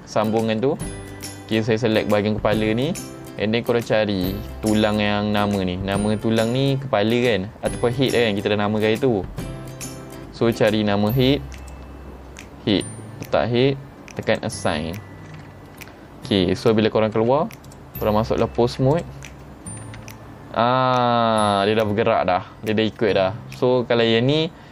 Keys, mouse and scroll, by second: 0.4 middle click, 1.3 middle click, 3.2-3.6 scroll down 3, 3.8-4.6 scroll up 6, 8.5-9.7 middle drag, 8.5-10.2 scroll up 8, 10.2 scroll down 2, 11.6 click, 14.3 click, 15.5-15.8 scroll down 3, 15.9 middle click, 17.2 Tab, 17.7 click, 18.7 ctrl+Tab, 19.0 click, 20.0 r.